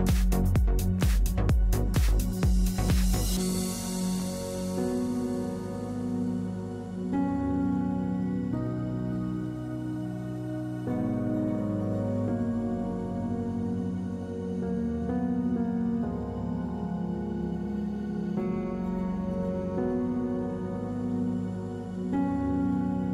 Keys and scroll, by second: 1.5 p, 3.4-4.2 typing, 5.6 typing, 5.8 Return, 8.9 \, 12.4 f, 13.5 F3.